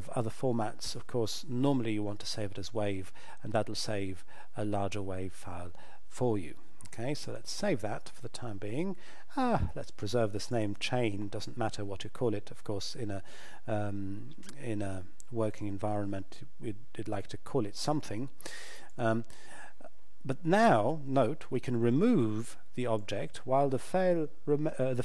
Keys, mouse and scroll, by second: 7.2 click, 10.5 click, 18.9 click, 23.0 click.